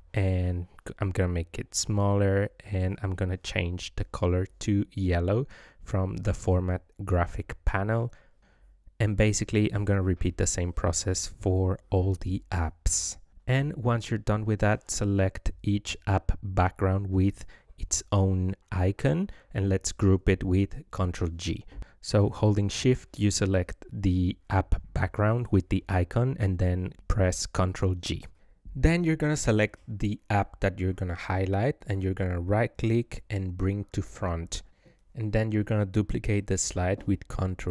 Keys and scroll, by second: 16.9 ctrl+g, 19.5 ctrl+g, 21.4 ctrl+g, 23.5 ctrl+g, 25.9 ctrl+g, 28.0 ctrl+g, 36.4 ctrl+d.